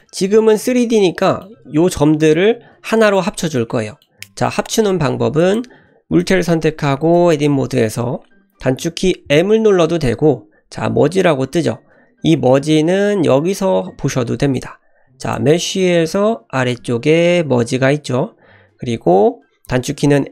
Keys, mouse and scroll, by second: 1.2-1.5 middle drag, 1.8 Tab, 3.2-4.7 middle drag, 4.9 Tab, 5.4 click, 6.2 click, 7.2 Tab, 9.3 m, 15.2-20.3 drag.